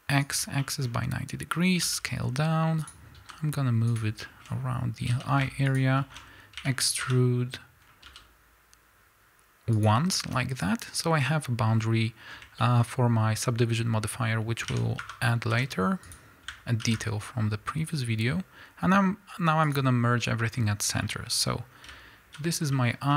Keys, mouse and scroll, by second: 0.9-1.9 scroll up 2, 1.9 g, 3.2 s, 4.2-5.8 shift+middle drag, 4.5-5.1 scroll up 2, 5.1 g, 5.8 shift+click, 6.0-19.7 shift+middle drag, 6.6 e, 7.1 Escape, 7.8 scroll up 1, 8.1 s, 12.3-12.6 scroll up 1, 14.7 e, 15.5 s, 19.7 alt+m, 20.6 scroll down 1, 21.0 middle click, 22.4 z, 22.6 scroll down 1, 22.8 middle click.